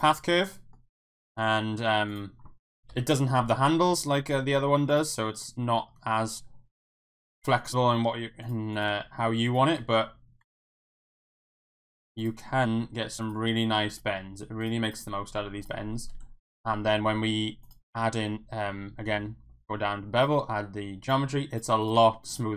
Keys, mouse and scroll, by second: 0.6 middle click, 1.1 Tab, 1.7 middle click, 2.1 click, 2.9 KP_1, 3.9 g, 5.6 g, 7.2 click, 7.6 click, 7.9 g, 8.4 click, 9.1 g, 9.4 click, 9.8 f, 10.5 ctrl+z, 10.9 shift+middle click, 11.2 g, 11.5 click, 12.7 e, 13.9 click, 13.9 e, 14.2 g, 15.2 g, 15.6 click, 16.1 Tab, 17.7 click, 20.2 click, 21.8 click, 21.9 Tab.